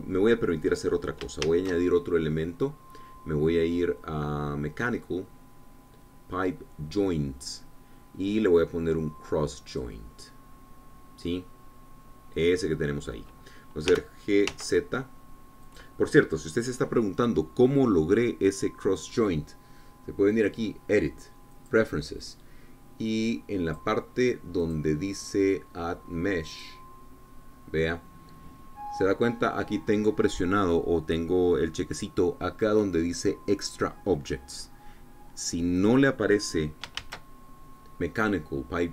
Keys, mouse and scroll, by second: 1.7-2.1 scroll down 1, 2.3 shift+a, 10.5 click, 11.3-12.1 scroll down 1, 12.1-14.7 middle drag, 14.7 g, 15.3 z, 16.5-20.3 drag, 21.2 click, 22.4 click, 24.2 click, 25.4 click, 27.4 click, 36.7-37.7 drag, 37.8 shift+a.